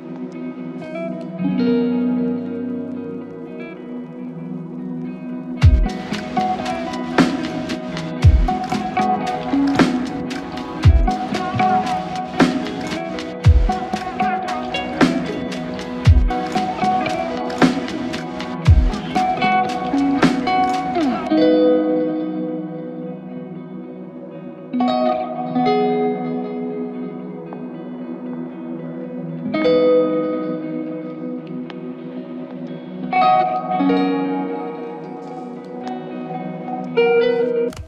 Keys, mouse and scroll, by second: 1.1 ctrl+click, 2.1 typing, 3.4 ctrl+click, 7.0 alt+click, 15.3 typing, 18.8 typing, 24.2 alt+click, 25.0 typing, 26.5 shift+click, 31.2 alt+click, 34.7 typing, 35.7 alt+click, 37.3 double click.